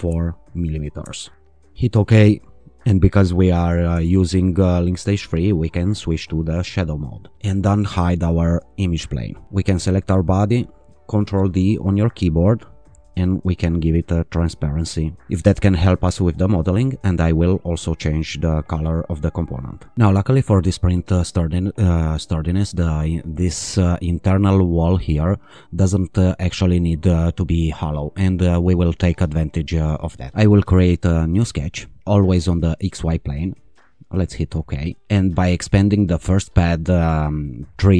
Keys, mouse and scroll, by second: 0.0 4, 1.0 Return, 1.8 click, 3.9 q, 8.4 click, 9.7 click, 11.3 ctrl+d, 13.8-15.2 drag, 17.0 click, 18.6 click, 19.7 click, 23.5 click, 31.3 click, 32.5 click, 34.0 click, 36.3 click.